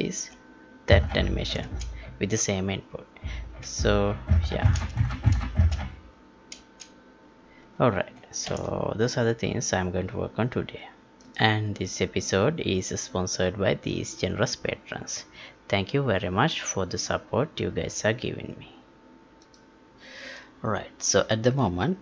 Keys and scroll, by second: 8.4 ctrl+p.